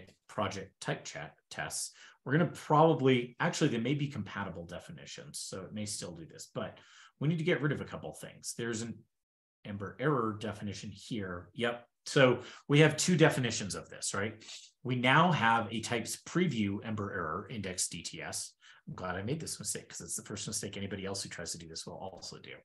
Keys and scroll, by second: 8.9 super+f, 10.7 super+Tab.